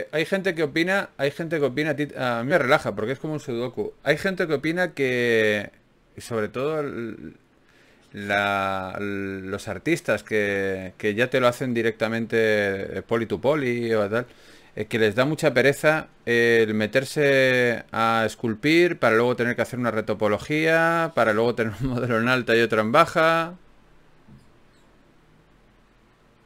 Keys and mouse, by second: 2.1 ctrl+z.